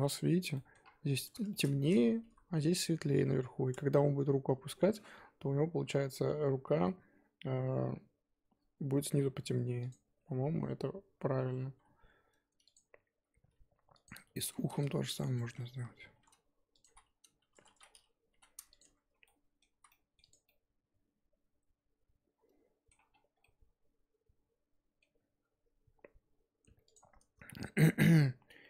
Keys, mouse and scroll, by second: 0.8-1.5 scroll up 2, 1.5 shift+middle click, 1.9-2.2 scroll down 4, 2.2 KP_1, 2.8 scroll up 2, 6.4 Tab, 9.5 Tab, 9.9 click, 10.0 Tab, 10.4 a, 11.5 s, 13.1 g, 14.3 s, 16.8 h, 17.7 ctrl+z, 18.3 g, 18.8 Tab, 19.2 middle click, 19.7 z, 19.9 middle click, 20.2 click, 20.4-23.1 middle drag, 23.1-23.4 scroll down 7, 23.4-25.1 middle drag, 25.1-26.9 scroll up 9, 26.9 click.